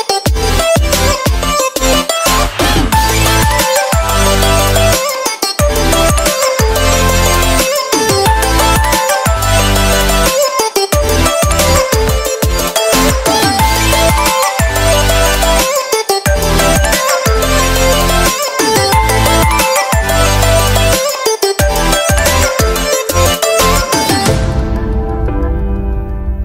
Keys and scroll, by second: 1.4 space, 21.2 ctrl+z.